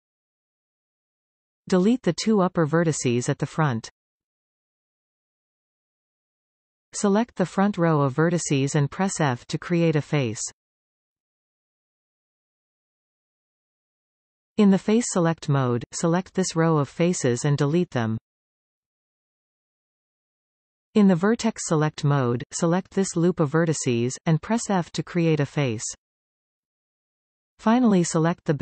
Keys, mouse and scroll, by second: 0.0 scroll up 1, 0.3-1.3 middle drag, 1.3 click, 2.2 shift+click, 3.0 x, 4.9-5.3 scroll up 2, 5.4 shift+middle click, 5.9-7.1 scroll up 2, 7.3 alt+shift+click, 7.8-8.1 scroll down 5, 9.0 f, 10.7-13.5 shift+middle drag, 13.5 click, 14.0 alt+a, 14.7 alt+shift+click, 15.4 x, 20.7 click, 21.1 click, 21.9 alt+shift+click, 24.1 f, 26.6-28.3 middle drag, 28.3 alt+a.